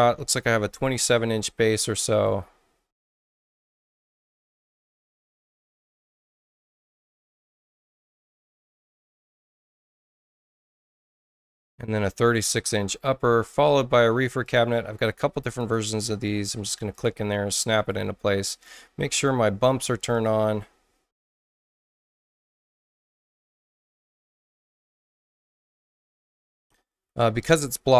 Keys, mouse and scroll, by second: 2.1 click, 5.2 click, 5.9 click, 6.3 click, 8.4 click, 9.2 click, 9.8-11.2 drag, 14.4 click, 15.5 click, 16.5 space, 16.9 click, 17.7 click, 18.5 click, 20.1 click, 21.4 click, 22.3-24.0 drag, 23.9 right click, 26.0 click, 26.4 right click.